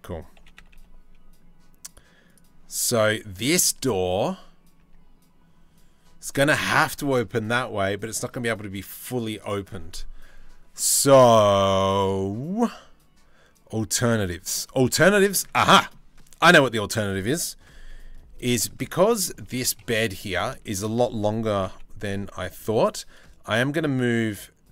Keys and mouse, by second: 2.6 Tab, 4.4 Tab, 14.3 shift+middle drag, 15.3 shift+middle drag, 18.3 Tab, 18.6 a, 19.1 KP_3, 19.5 KP_1, 20.2 shift+middle click, 21.1 g.